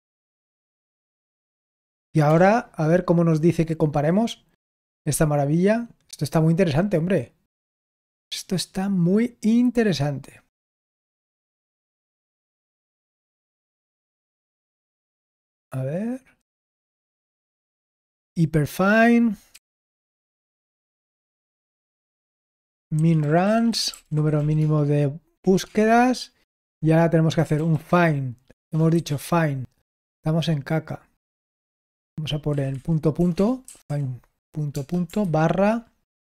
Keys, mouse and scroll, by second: 1.4 typing, 18.5 click, 19.4-28.8 typing, 34.7-35.2 typing.